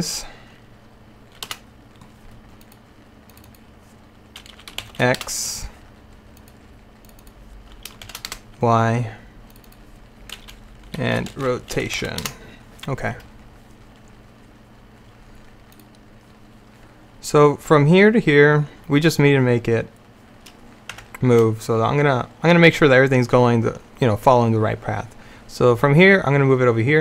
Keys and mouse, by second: 2.7-5.5 drag, 6.5-11.6 drag, 15.8-20.3 drag, 21.0 Tab.